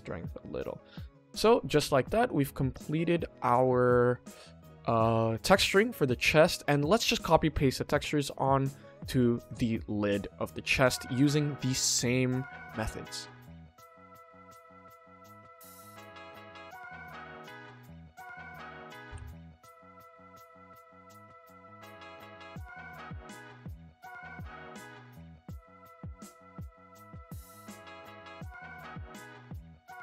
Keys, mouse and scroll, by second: 1.0-1.7 ctrl+middle drag, 1.9-2.2 middle drag, 2.4-3.0 scroll down 2, 3.2-3.6 middle drag, 3.9 shift+middle drag, 4.4 middle click, 7.1 click, 7.8 click, 8.3 click, 9.4 click, 10.0-10.5 middle drag, 10.7 shift+middle drag, 11.5-12.2 middle drag, 12.7 shift+middle click, 13.5 click, 14.4-15.8 drag, 16.3-16.9 middle drag, 17.8 scroll up 1, 18.0 Tab, 18.4 a, 19.0 u, 20.5 click, 20.9 click, 21.3 middle drag, 21.6 Tab, 22.1 click, 22.6 alt+click, 23.9 alt+shift+click, 24.8 ctrl+z, 25.2 alt+shift+click, 25.8 ctrl+z, 26.1 alt+shift+click, 26.7 middle click, 27.6 alt+shift+click, 28.4 middle click, 29.4 alt+shift+click.